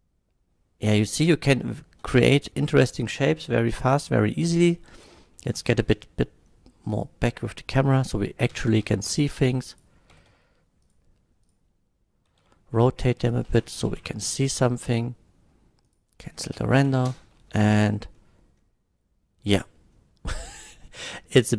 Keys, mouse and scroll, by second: 4.0 click, 5.0 click, 5.4 middle click, 5.9 KP_0, 6.9 click, 8.5 g, 8.7 z, 8.9 z, 9.7 click, 10.1 g, 10.3 z, 10.9 click, 10.9 g, 11.4 click, 12.3 r, 12.4 z, 13.3 click, 13.9 shift+Left, 15.9 click, 16.2 shift+click, 16.7 shift+Left, 17.1 space, 18.2 middle drag, 21.2-21.5 middle drag.